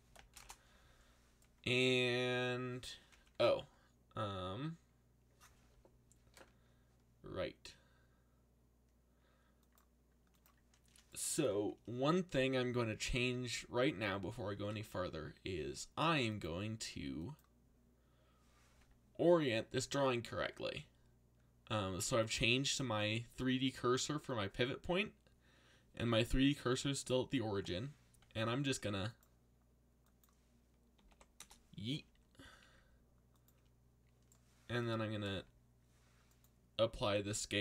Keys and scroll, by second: 0.0 3, 0.3 shift+', 0.4 Return, 14.7 a, 28.7 r, 30.7-31.6 typing, 32.4 ctrl+a.